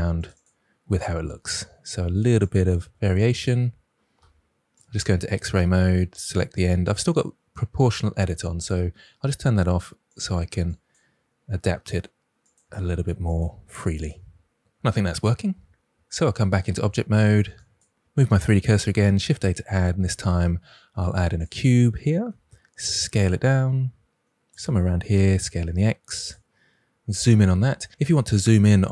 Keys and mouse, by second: 0.1 click, 0.3 click, 1.2 r, 2.4 click, 3.1 drag, 4.1 alt+z, 5.6 s, 6.9 right drag, 8.5 click, 9.4 s, 10.6 drag, 11.8 r, 12.4 click, 12.6 s, 13.2 click, 13.4 g, 13.9 click, 15.8 Tab, 17.5 shift+right click, 19.1 shift+a, 22.2 s, 24.4 click, 25.1 s, 25.3 x, 26.1 click.